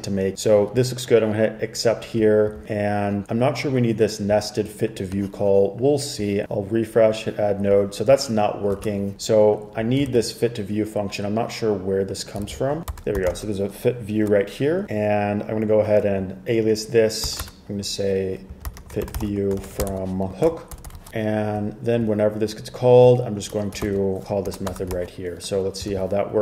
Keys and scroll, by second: 8.9 super+Tab, 10.2 super+c, 12.6 super+c, 12.8-14.0 typing, 17.4-21.0 typing, 24.0 super+v, 24.1-25.1 typing, 26.0 super+r.